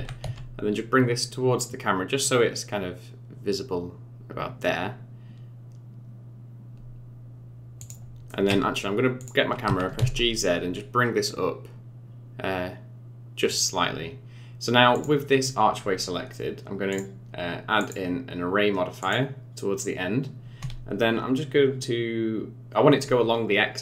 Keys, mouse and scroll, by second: 8.3 middle click, 9.2 click, 9.6 g, 14.9 click, 16.9 click, 17.8 click.